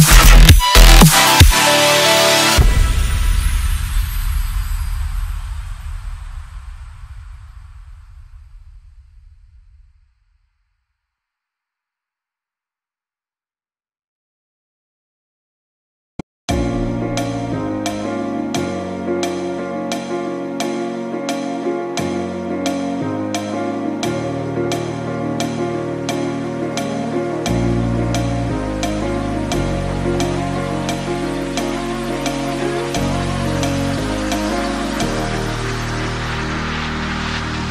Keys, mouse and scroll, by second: 0.0-2.1 drag, 7.8 space, 10.9 space, 12.1-13.8 drag, 14.8 shift+d, 21.9 click, 25.3-30.7 drag, 32.6-35.6 drag.